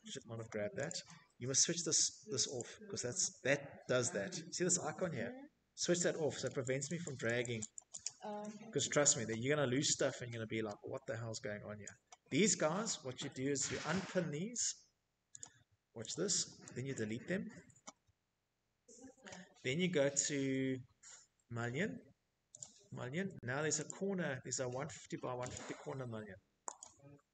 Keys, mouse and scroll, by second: 0.3 click, 3.0 typing, 4.0 click, 4.5 click, 4.8 click, 5.1 click, 5.5 click, 5.8 click, 6.0 middle click, 6.2 Escape, 6.4-6.9 scroll, 6.5 Escape, 7.9-8.6 scroll, 9.1 middle click, 9.6 click, 9.9 right click, 10.0 click, 10.3 scroll, 12.5 click, 13.1 click, 13.9 click, 14.7 click, 15.7 Delete, 20.3 click, 21.6 click, 23.3 click, 24.5 click, 26.0 middle click, 26.0 middle click, 26.1 middle click, 26.5 Escape, 26.8 Escape.